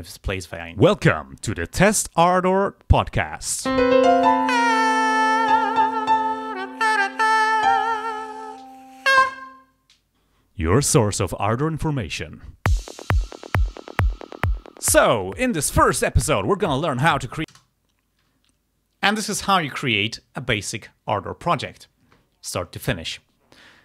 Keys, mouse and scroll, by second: 0.4 click, 1.0 scroll up 1, 17.6 space.